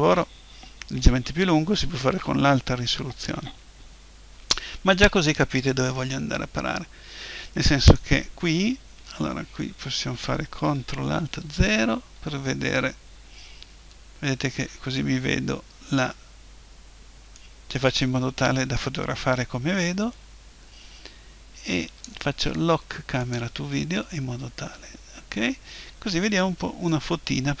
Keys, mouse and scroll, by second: 5.5-7.4 middle drag, 11.5 ctrl+alt+KP_0, 17.3-19.1 drag, 23.2-24.9 drag, 25.2-27.6 middle drag.